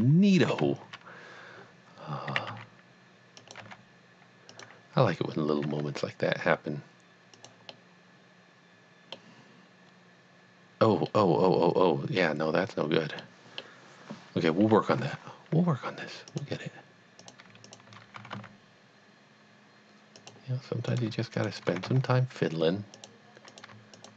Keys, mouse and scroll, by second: 0.6 KP_1, 2.3 s, 2.7 z, 3.5 click, 3.7 g, 4.5 click, 5.6 g, 7.4 click, 7.7 middle click, 8.1 middle click, 11.2 middle click, 11.8 middle click, 13.4 middle click, 16.3 middle click, 16.3 click, 17.2 click, 17.7 shift+click, 18.2 g, 18.3 g, 20.2 click, 20.9 click, 21.4 shift+click, 21.9 g, 22.9 click, 23.5 click, 23.9 shift+click.